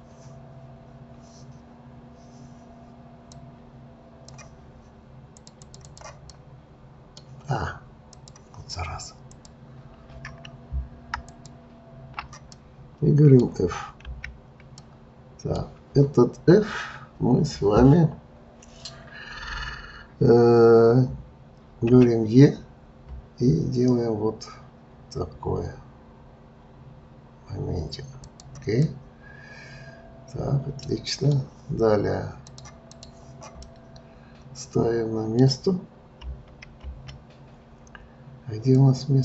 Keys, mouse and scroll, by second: 3.3-5.4 drag, 5.5 click, 5.8 click, 6.3-8.1 middle drag, 8.1-9.4 drag, 11.2 alt+click, 12.6-14.0 middle drag, 14.0 f, 14.8-17.8 middle drag, 21.9 e, 28.8-32.0 middle drag, 32.5-33.6 drag, 33.6-36.2 middle drag, 36.2 KP_3, 36.8 KP_1, 38.7-39.2 middle drag.